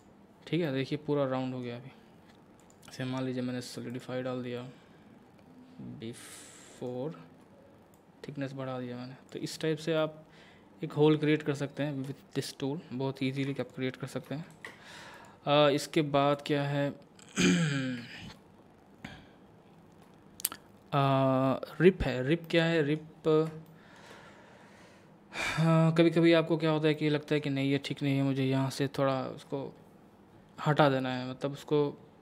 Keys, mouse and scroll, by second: 0.7-2.6 middle drag, 2.6 click, 6.8-9.6 drag, 9.6 scroll down 1, 10.0-13.4 middle drag, 13.4 x, 13.6 click, 14.5 shift+a, 15.2 click, 18.0 Tab, 19.0-20.6 scroll down 1, 22.4 middle click, 23.2 scroll up 1, 23.7 shift+middle click, 26.9-32.2 middle drag.